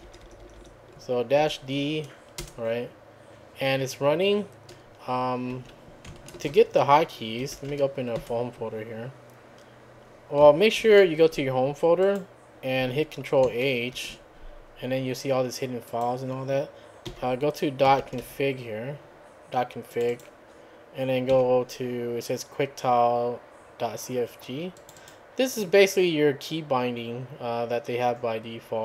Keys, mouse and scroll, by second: 1.4 d, 2.4 Return, 5.5 `, 6.4 ctrl+space, 7.2-8.2 typing, 10.8 ctrl+h, 12.0 click, 13.9 ctrl+h, 15.9 click, 17.1-18.7 typing, 18.9 scroll up 2, 19.9 click, 21.3 q, 24.8 click.